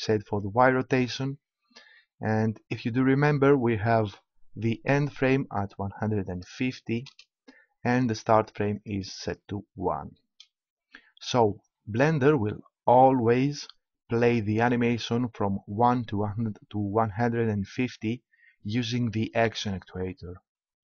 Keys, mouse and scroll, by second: 5.0-7.4 drag, 8.7-10.7 drag.